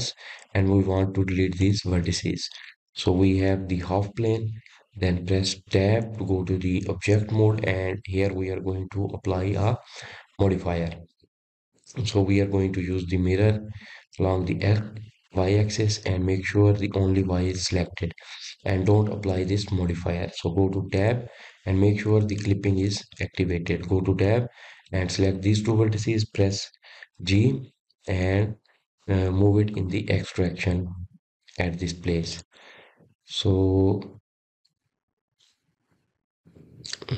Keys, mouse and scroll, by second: 1.1 click, 1.7 click, 3.8 x, 6.5-9.7 scroll up 3, 10.0 Tab, 12.0-15.1 drag, 17.6 click, 20.7 click, 21.9-24.9 scroll down 2, 24.9 Tab, 26.5 click, 27.3-27.7 scroll up 3, 27.7-29.0 scroll down 3, 29.0 click, 31.4 g.